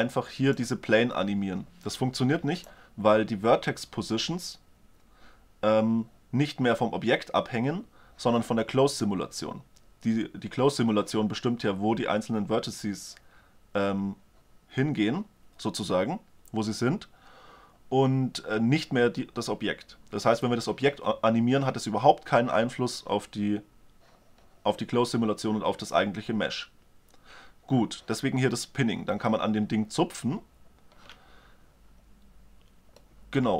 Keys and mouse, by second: 0.4-2.1 drag, 32.6-33.5 middle drag.